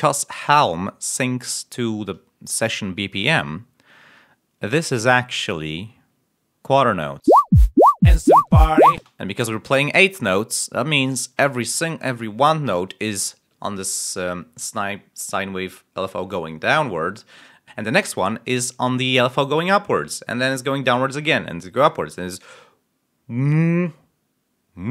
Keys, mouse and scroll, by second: 7.1 l, 8.3 l, 8.9 space.